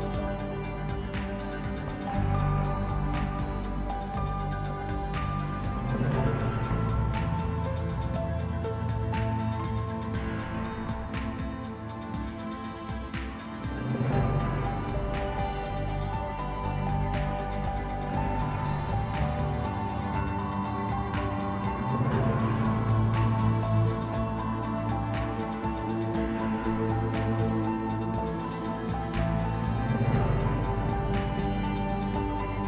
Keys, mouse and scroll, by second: 3.0 Delete, 3.9 Tab, 4.5 drag, 5.8 click, 7.1 s, 7.9 click, 9.0 click, 10.1 click, 10.7-12.9 drag, 14.0 click, 16.5-18.0 drag, 18.3 middle click, 18.8 KP_7, 19.2 g, 20.8-23.6 drag, 24.0 click, 25.4 click, 26.2-29.0 drag, 29.2 right click, 30.8 shift+Left, 30.9 space.